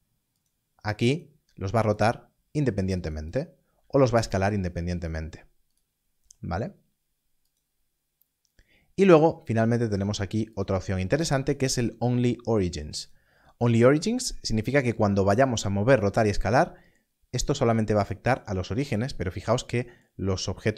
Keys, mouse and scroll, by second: 2.9 right click, 3.7 Left, 3.7 s, 5.7 right click, 7.4 click, 10.5 click, 13.0 click, 17.4 click.